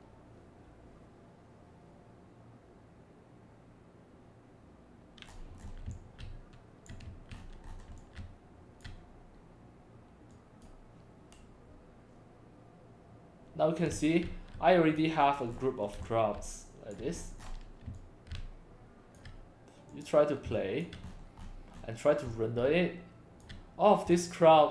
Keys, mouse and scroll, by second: 5.3-5.7 scroll down 4, 5.4-8.2 typing, 5.9-7.1 drag, 7.4-7.8 scroll up 3, 8.0-8.8 drag, 10.4 click, 13.9 x, 14.2 c, 15.2 click, 15.5-15.9 scroll down 2, 16.0 x, 16.1 click, 17.2 scroll up 1, 17.4 scroll down 1, 17.9 x, 18.0-19.2 drag, 19.9 click, 20.5 c, 20.6 drag, 21.1-21.9 scroll down 6, 22.3 x, 22.3-23.4 drag, 22.6 c, 24.1 c, 24.3-24.7 drag.